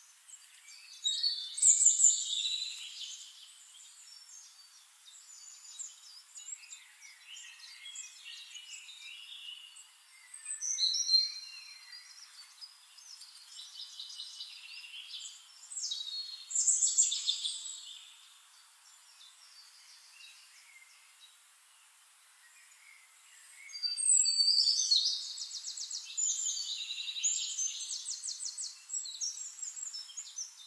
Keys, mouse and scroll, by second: 1.3 click, 2.9 click, 4.2 click, 5.8-6.8 middle drag, 7.0 middle click, 13.3 click, 15.3 click, 16.1 click, 18.8 click, 20.7 click, 22.4 ctrl+click, 23.8 ctrl+click, 24.9 click, 25.6 middle click, 27.4 click, 29.2 ctrl+click, 30.4 ctrl+click.